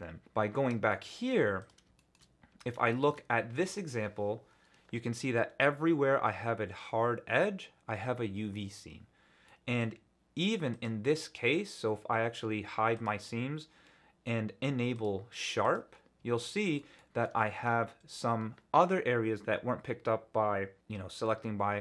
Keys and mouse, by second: 0.4 Tab, 0.9-1.3 shift+drag, 2.0 shift+click, 2.5 Tab, 2.9 shift+click, 3.6 click, 9.4 middle click, 10.9-13.2 drag, 14.9 click, 16.4 alt+click, 17.0 click, 17.4 shift+click.